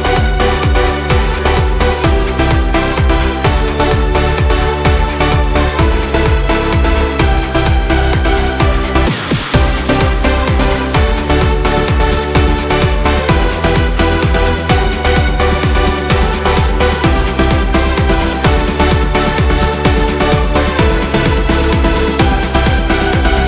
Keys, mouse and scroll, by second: 1.0 k, 5.7 k, 8.5 click, 9.5 ctrl+r, 13.0 click, 13.6-14.1 scroll up 1, 15.1 k, 18.4 k, 21.8 k.